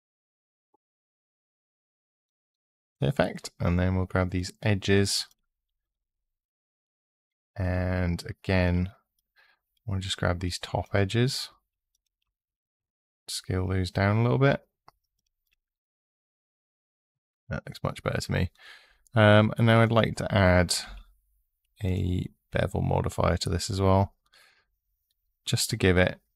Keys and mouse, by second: 4.1 click, 5.0 click, 7.5 2, 8.3 click, 8.9 click, 12.6 s, 14.9 click, 19.6-21.7 drag.